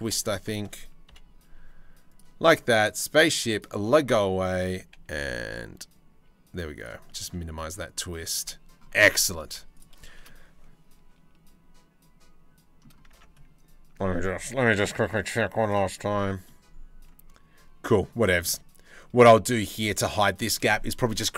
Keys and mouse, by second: 0.7 KP_7, 1.1 z, 3.2 click, 4.0 shift+middle click, 4.7 g, 6.7 middle click, 7.6 shift+middle click, 7.9-9.0 drag, 9.1 z, 9.7 shift+middle click, 12.1 click, 12.8 Tab, 16.1-17.6 drag, 17.6 middle drag, 18.1-21.3 middle drag.